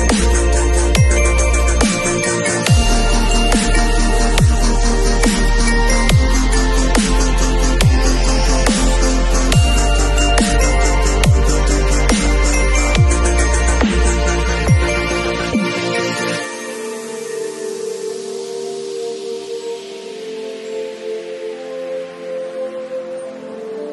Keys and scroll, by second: 2.0 ], 3.6 ], 6.4 [, 7.5 ], 11.7 [, 15.0 ], 18.1 [.